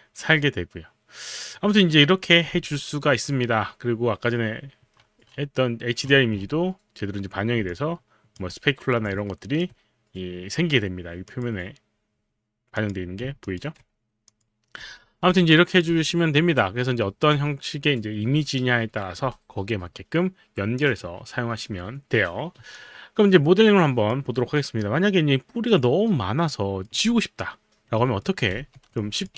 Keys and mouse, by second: 7.7 alt+click, 9.0 click, 11.3 click, 12.7 click, 13.7 alt+click, 14.2 click, 14.8 f, 15.6 alt+click, 22.8 alt+click, 24.3 alt+right click, 24.7-28.3 alt+drag, 28.3 alt+middle click, 29.0 alt+click.